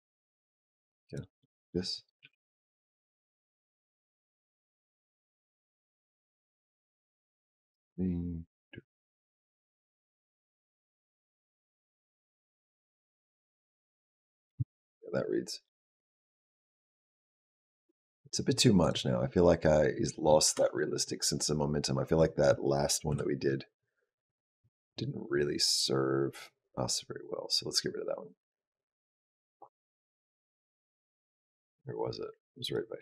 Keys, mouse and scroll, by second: 1.2 middle click, 2.1 g, 5.1 click, 14.4 space, 18.8 click, 20.3 space, 22.9 KP_Decimal, 24.7 scroll down 2, 25.6 click.